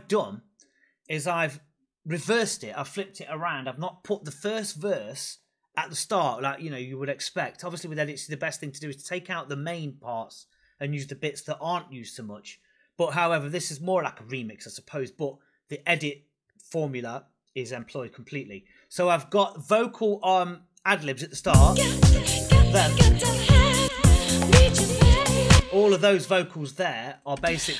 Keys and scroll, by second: 21.3 space, 23.7 space, 25.4 space, 27.2 space.